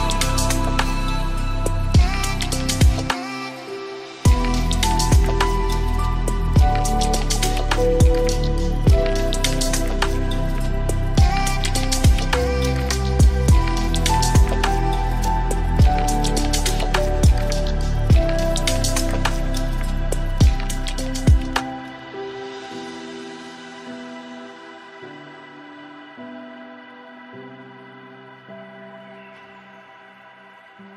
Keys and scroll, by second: 2.3 ctrl+d, 8.8 ctrl+space, 22.0 ctrl+shift+i, 27.3 shift+F6.